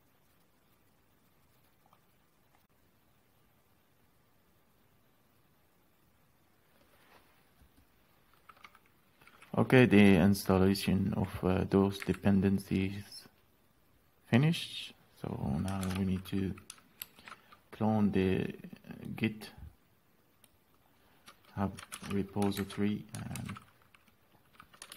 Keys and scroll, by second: 12.5 Up, 16.3 ctrl+c, 17.5 alt+é, 22.4 ctrl+c, 23.1 alt+&, 23.9 alt+s.